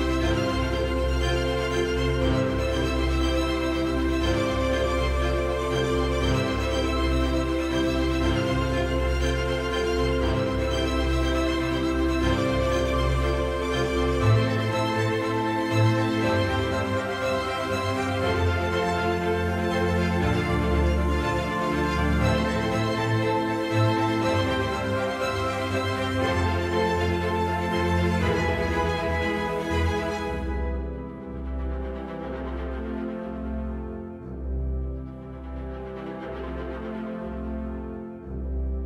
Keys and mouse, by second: 0.2 g, 0.5 z, 1.2 right click, 2.0-2.6 shift+middle drag, 4.1-6.7 middle drag, 9.2 z, 11.6 right click, 15.3 n, 17.4 right click, 18.8-24.4 right drag, 25.6 g, 25.8 z, 27.0 click, 27.3 s, 28.5 click, 28.9 s, 30.1 right click, 30.8-34.6 middle drag, 31.9 2, 34.9 g, 35.1 z, 36.2 click.